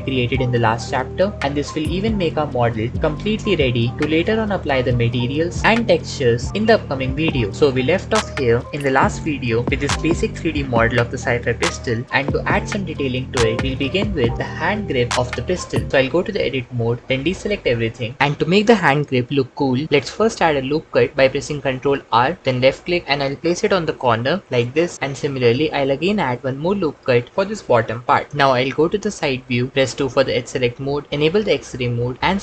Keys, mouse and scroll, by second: 1.3 f, 2.8 ctrl+r, 2.9-4.1 typing, 4.0 Tab, 4.2 alt+z, 5.9 Tab, 16.6 Tab, 17.4 middle click, 21.5 ctrl+r, 26.6 ctrl+r, 29.6 KP_3, 29.7 2, 31.1 alt+z.